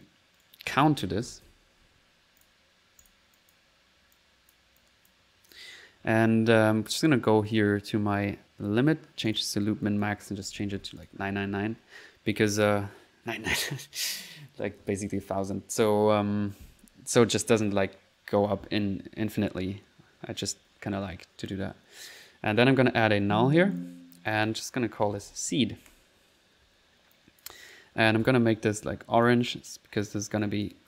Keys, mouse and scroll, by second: 0.0-1.9 typing, 0.4 right click, 2.4 click, 3.0 click, 3.4 click, 3.8 click, 4.1 click, 4.8 click, 5.3 click, 6.9 click, 7.5 click, 9.3-11.6 drag, 22.6 click, 23.0-23.7 typing, 23.8 alt+click, 24.3 alt+click, 27.1 click, 28.2 c, 28.9 c, 29.2 click, 30.0 right click, 30.6 click.